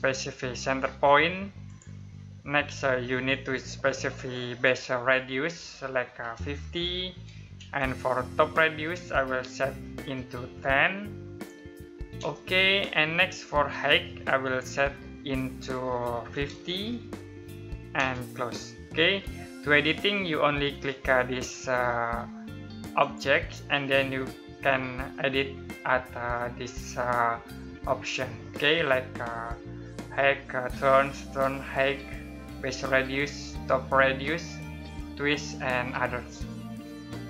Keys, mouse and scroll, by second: 1.2 click, 5.8-7.3 typing, 10.0-11.7 typing, 15.9-16.3 typing, 17.5 space, 22.6 click.